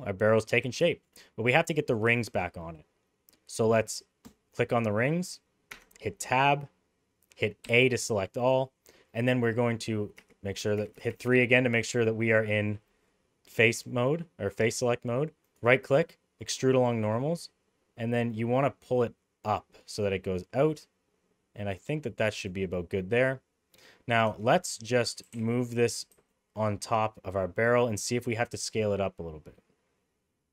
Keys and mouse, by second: 0.0-0.3 middle drag, 1.0 shift+middle click, 4.2 click, 5.7 Tab, 7.6 a, 10.1-11.2 typing, 15.4-22.4 right drag, 24.3 Tab, 24.7 middle click, 25.2 g.